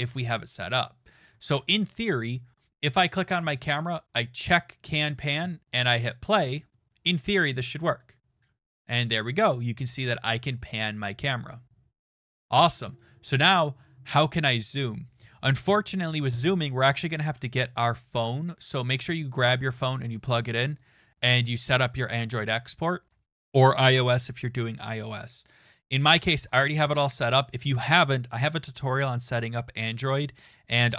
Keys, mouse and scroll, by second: 0.8 click, 1.6 ctrl+s, 2.8 click, 4.2 click, 4.6 click, 6.0 click, 7.6 click, 12.9 click.